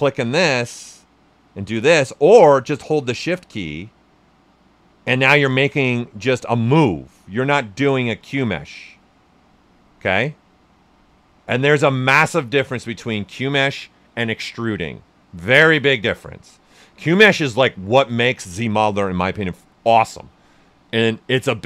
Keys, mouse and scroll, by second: 18.4 alt+right click.